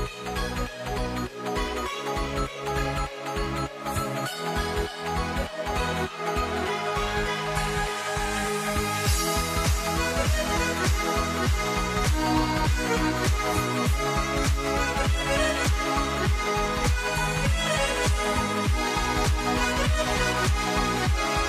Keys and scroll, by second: 8.0 ctrl+t.